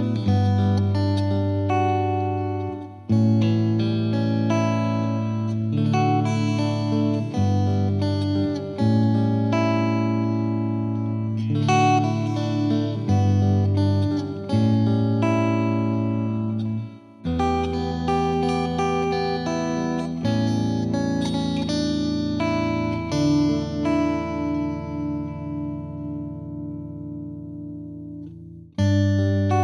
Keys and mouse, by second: 0.5 alt+click, 0.7 shift+click, 1.2 click, 1.5 ctrl+z, 2.0 Escape, 2.6 F3, 2.8 F3, 3.1 click, 3.7 click, 5.2 click, 5.3 click, 6.2 ctrl+click, 6.8 click, 6.8 F2, 7.2 click, 7.7 click, 8.2 click, 8.8 click, 9.7 click, 11.3 click, 11.8 click, 12.3 click, 13.4 click, 14.6 click, 16.6 click, 17.1 click, 18.4 click, 19.1 click, 19.9 F3, 20.6 click, 21.9 F2, 22.4 click, 25.2 click, 26.3 click, 26.9 click, 27.0 click, 27.8 click, 28.2 click, 28.6 click, 28.7 click, 29.1 click.